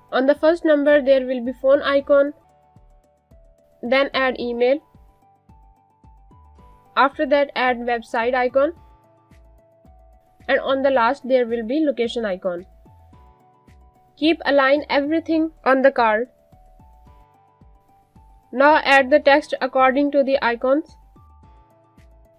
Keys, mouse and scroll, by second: 0.9 click, 15.0 click, 15.3 space, 16.5 click, 18.1-19.7 typing, 20.4 click, 21.8 shift+click.